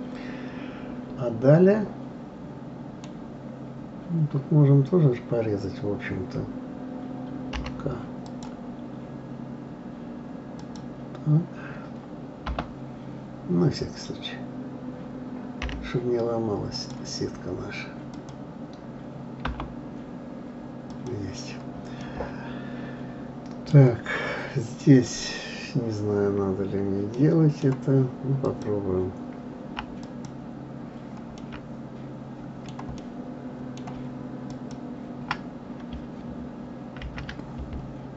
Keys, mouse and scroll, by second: 3.6-5.7 scroll up 2, 20.9 click, 22.0-25.0 middle drag, 25.5-27.0 scroll down 4, 27.2-28.4 middle drag, 28.4 click, 30.0 alt+click, 31.4 alt+middle click, 33.0-34.4 middle drag, 34.4 alt+click, 37.0 ctrl+b.